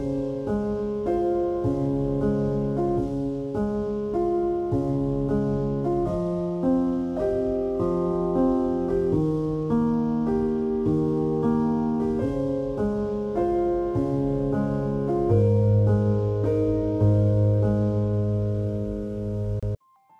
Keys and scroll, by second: 0.8 ctrl+-.